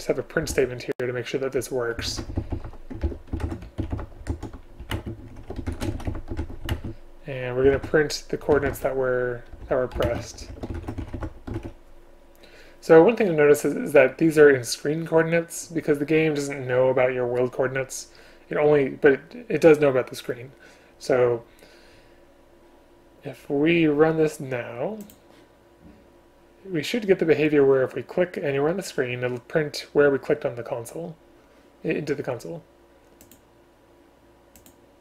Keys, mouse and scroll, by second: 3.1 ctrl+BackSpace, 5.0 shift+space, 6.7 space, 10.1 shift+space.